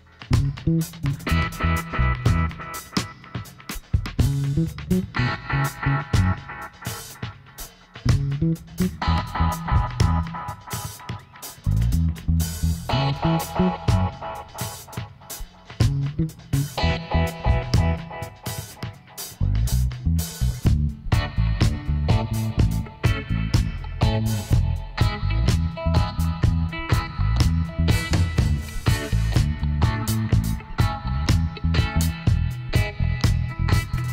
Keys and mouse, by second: 0.6-2.3 drag, 2.1 s, 5.6 g, 9.3-10.8 middle drag, 10.8 ctrl+r, 13.3-14.6 drag, 14.6-15.6 middle drag, 15.6 right click, 15.9 z, 17.0 b, 19.0-20.7 drag, 21.1-22.8 right drag, 21.3 b, 22.8 middle click, 23.1-24.8 drag, 25.3-27.6 middle drag, 27.6-29.4 right drag, 28.7 b, 31.8 click, 33.9-34.1 middle drag.